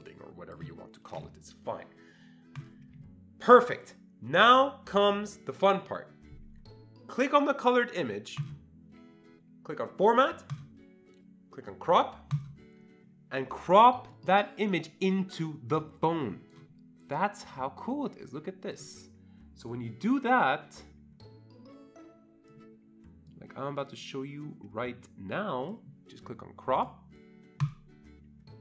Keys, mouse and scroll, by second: 8.4-10.5 shift+drag, 10.5 click, 12.3 click, 14.1-27.6 drag, 27.6-28.6 drag.